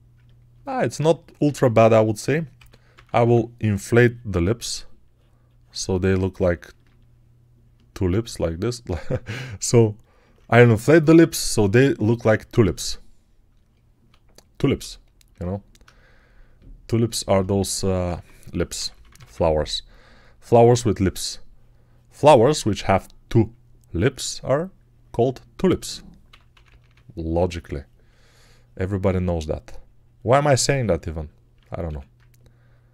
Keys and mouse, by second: 1.3 alt+q, 2.4 6, 2.8 [, 2.9 [, 3.1 [, 17.6 alt+q, 18.0-19.1 typing, 26.1 p, 26.4 ], 26.5 ], 30.6 alt+right click, 31.7 1.